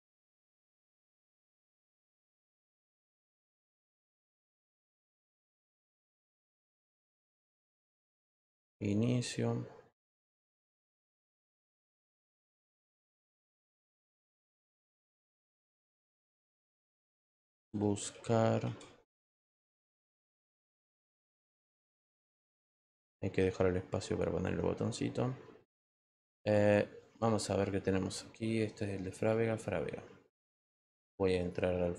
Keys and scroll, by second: 3.7 t, 6.3-8.6 typing, 15.2 t, 16.9-19.1 typing.